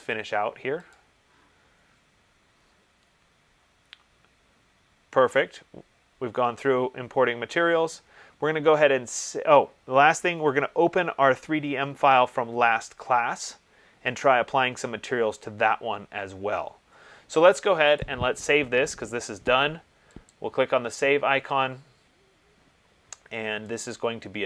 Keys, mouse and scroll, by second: 1.1 click, 2.0 middle click, 2.1 middle click, 2.2 middle click, 4.2 middle click, 18.2 click, 20.5 click, 23.9 click.